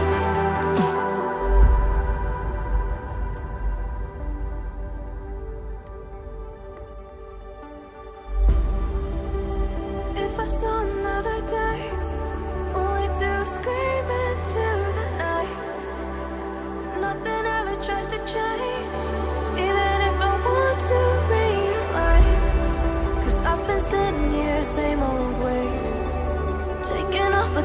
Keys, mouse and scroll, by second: 7.6-8.1 ctrl+scroll up 2, 11.6 ctrl+click, 12.3 ctrl+click, 16.6 ctrl+click, 19.2 Down, 19.3 Down, 19.4 Down, 19.7 Down, 26.9 ctrl+click.